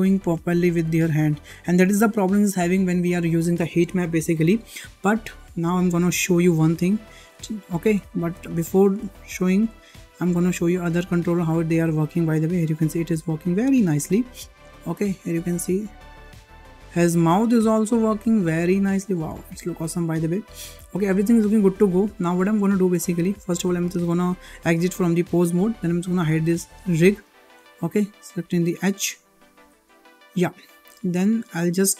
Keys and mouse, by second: 6.6 shift+middle drag, 7.4 shift+middle drag, 7.9 shift+middle drag, 8.3 middle drag, 9.0 shift+middle drag, 9.4 middle drag, 10.2 click, 10.8 shift+middle click, 11.0-11.4 middle drag, 11.7 g, 14.6 shift+middle drag, 16.3-16.7 middle drag, 16.9 shift+middle click, 17.9 g, 20.3-20.6 shift+middle drag, 21.0 middle click, 22.9 ctrl+Tab, 26.3 g, 27.3 click, 27.9 click, 28.3 g, 29.5 h, 30.2 `, 31.7 shift+middle click.